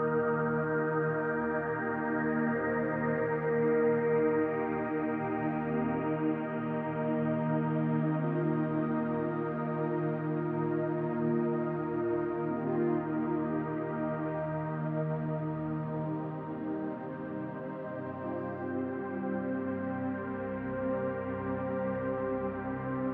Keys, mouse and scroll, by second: 0.4 click, 2.3 click, 3.2 e, 4.6 s, 13.6 s, 22.2 s.